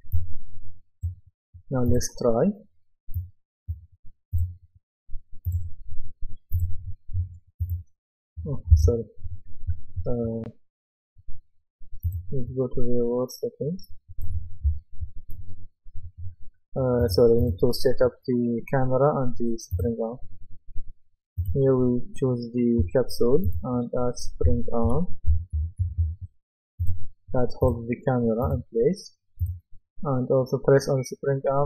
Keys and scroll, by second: 8.8 Escape, 14.7 s, 24.2-26.5 typing.